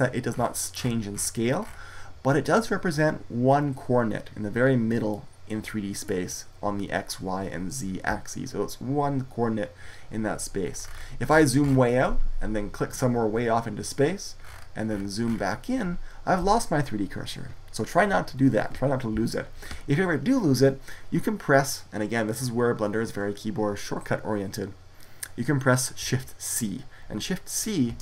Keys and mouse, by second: 0.9 middle click, 14.5-27.7 drag, 27.7 shift+c.